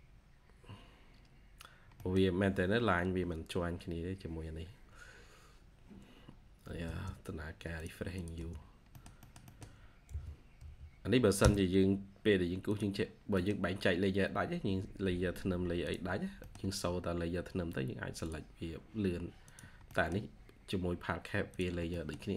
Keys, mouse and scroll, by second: 1.4-1.8 scroll up 1, 1.8 middle click, 2.0-3.0 scroll down 1, 5.8-6.2 scroll up 1, 6.6 1, 6.9 scroll up 1, 7.2 1, 8.0 double click, 8.2 space, 8.5 scroll down 1, 8.8 middle click, 9.2 scroll down 1, 9.4 middle click, 10.0 typing, 11.5 scroll, 11.6 scroll up 1, 11.8-12.5 typing, 12.8-13.1 scroll down 1, 13.1 scroll, 13.3 middle click, 13.4-14.4 scroll down 1, 14.7 scroll up 1, 16.0 scroll down 1, 16.2 scroll up 1, 16.3 middle click, 19.7 middle click, 21.8 middle click.